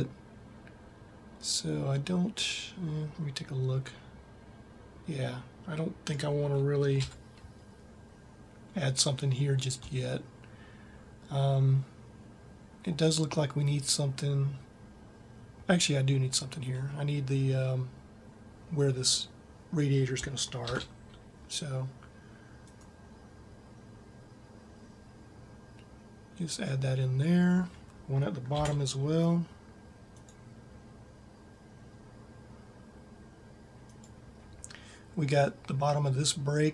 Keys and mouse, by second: 6.8 KP_1, 20.5 ctrl+r, 28.3 ctrl+r.